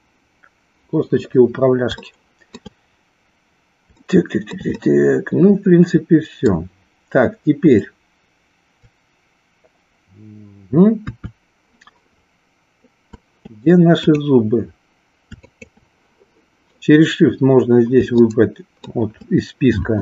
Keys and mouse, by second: 1.9 shift+middle click, 4.0 shift+middle click, 4.8-6.6 middle drag, 10.9 KP_3, 14.0 click, 15.4 shift+click, 18.3 shift+middle click.